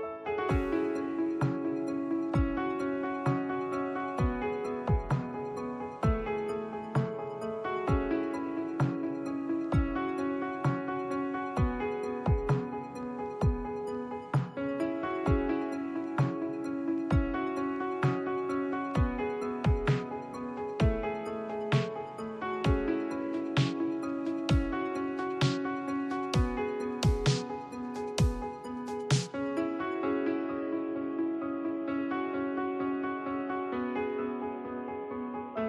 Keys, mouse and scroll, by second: 6.7-13.8 drag, 15.6 n, 17.5 click, 18.4 n, 19.2-21.6 middle drag, 26.8 shift+Left, 29.4 shift+a.